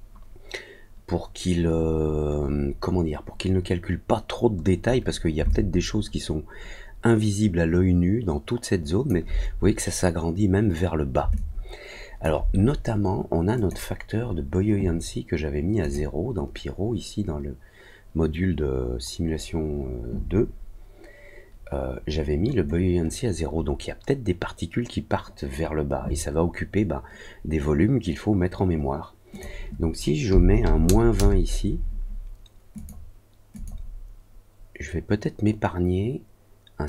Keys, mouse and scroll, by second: 5.4-9.0 alt+drag, 11.3 alt+click, 13.5 click, 15.7 click, 29.2 click, 32.7 click, 33.5 click.